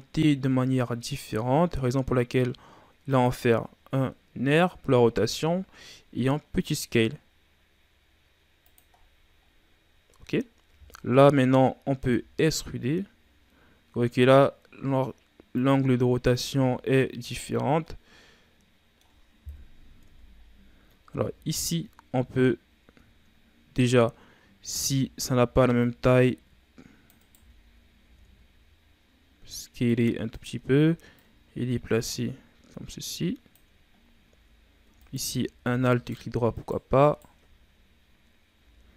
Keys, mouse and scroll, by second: 0.1 r, 3.7-4.8 scroll up 4, 4.8 scroll up 1, 5.1 s, 8.9-9.4 scroll down 1, 9.4-10.4 scroll down 8, 10.4-11.9 scroll up 5, 11.9 e, 15.9-16.3 scroll down 3, 16.3 Tab, 17.4-17.8 scroll up 4, 17.8-19.4 middle drag, 19.4 KP_3, 19.9 Tab, 20.3-21.0 scroll up 2, 21.0 z, 21.7-23.0 scroll down 3, 23.0-23.6 shift+scroll up 4, 24.7 c, 27.3 z, 27.9 s, 31.1-34.0 drag, 34.0 scroll up 1, 34.2 z, 34.9 alt+right click, 35.8 alt+right click, 36.5 alt+right click, 37.0 alt+right click, 38.5 z.